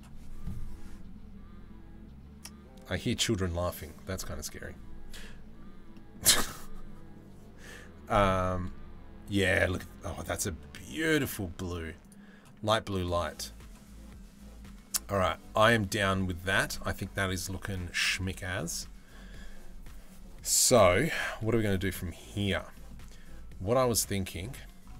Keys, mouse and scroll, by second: 5.6 middle click, 9.7 middle click, 10.6 middle click, 22.0 click, 22.3 middle click.